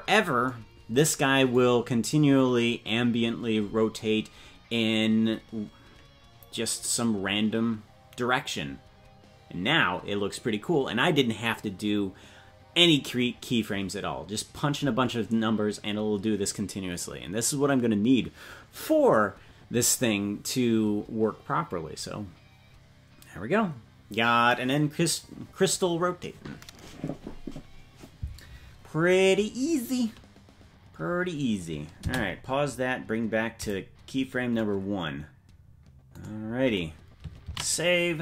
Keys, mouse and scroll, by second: 0.5 scroll down 1, 33.6-38.2 drag.